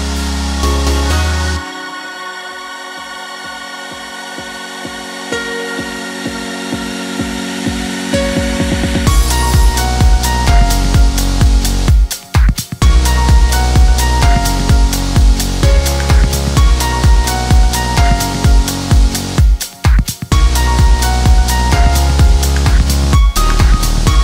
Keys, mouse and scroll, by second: 0.5 click, 0.9 click, 3.1 click, 5.6-20.8 drag, 20.8 ctrl+t, 21.9-24.2 alt+drag.